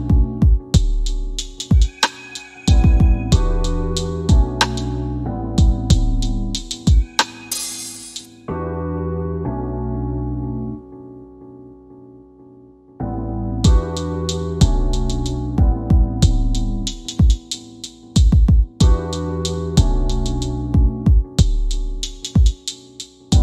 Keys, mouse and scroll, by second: 2.3 scroll up 1, 3.3 scroll down 1, 4.5 scroll up 1, 5.0 middle click, 6.4 scroll down 1, 8.0 click, 13.8 click, 14.8 scroll up 1, 16.6 click, 22.1-22.9 typing, 23.0 scroll down 1.